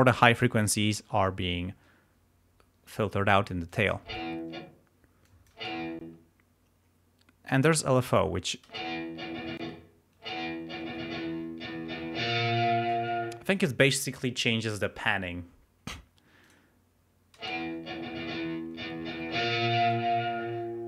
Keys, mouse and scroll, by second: 3.6 click, 4.0 space, 5.2 click, 5.5 space, 7.9 click, 8.6 space, 9.5 space, 13.2 space, 16.4 click, 17.3 space, 19.9-20.8 drag.